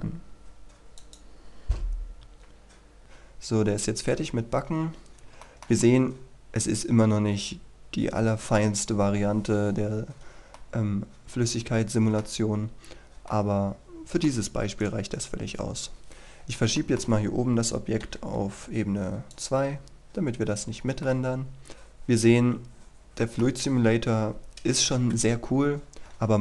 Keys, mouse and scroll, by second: 1.0 click, 3.7-4.3 scroll up 1, 5.2 scroll up 1, 5.5-8.7 shift+middle drag, 8.7-9.9 scroll down 1, 9.9-10.7 scroll up 1, 10.7-12.5 middle drag, 12.5-13.3 scroll down 1, 13.3 middle click, 14.9 right click, 15.7-16.1 scroll up 1, 16.1-16.7 scroll down 1, 16.9 shift+middle click, 18.1 m, 19.4 click, 20.7-21.1 scroll down 1, 21.1-23.8 middle drag, 25.4 KP_3, 26.0 shift+middle click.